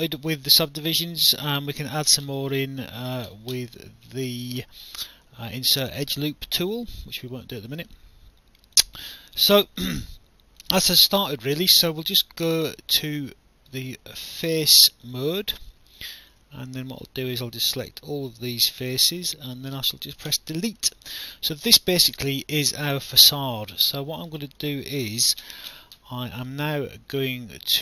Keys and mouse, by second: 1.1 alt+click, 2.8 alt+middle click, 4.4 click, 6.7 click, 8.0 alt+click, 9.9 alt+click, 11.3 right click, 14.3 alt+click, 15.7 alt+click, 16.8 click, 17.8 alt+click, 21.1 alt+click, 24.9 alt+middle click.